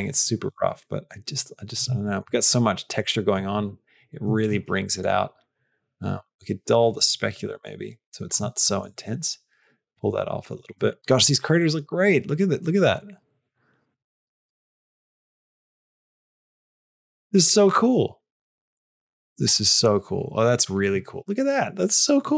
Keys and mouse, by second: 0.0-1.7 drag, 1.9 shift+middle click, 3.0 shift+middle click, 4.9-8.2 drag, 8.5 shift+middle click, 11.0-20.7 drag.